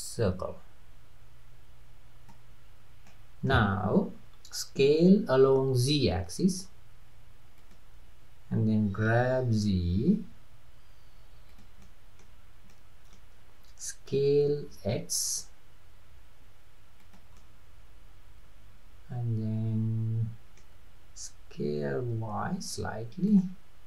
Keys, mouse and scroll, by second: 2.7-3.1 scroll down 1, 3.1-4.8 middle drag, 4.8 s, 9.1 g, 11.9-12.4 middle drag, 12.4-12.7 scroll down 1, 12.7-14.2 middle drag, 14.2 s, 17.4-20.4 middle drag, 21.7 s.